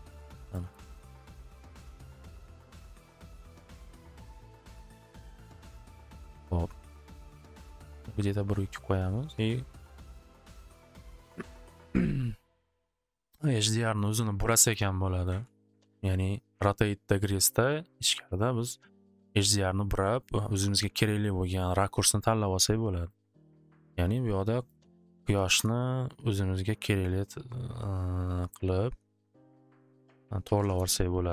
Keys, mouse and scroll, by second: 0.9 middle click, 1.9 middle click, 7.0 click, 7.1 2, 7.3 Return, 9.1-9.8 typing, 10.7 click, 12.4 click, 13.6 click, 13.7 click, 14.0 click, 14.1 click, 14.2-16.0 typing, 14.7 Return, 15.1 click, 15.2 click, 22.9 click, 23.1 click, 23.4 click, 23.8 click, 24.7 click, 24.8 click, 25.1-26.1 typing, 27.8-28.9 typing, 30.2-31.3 typing.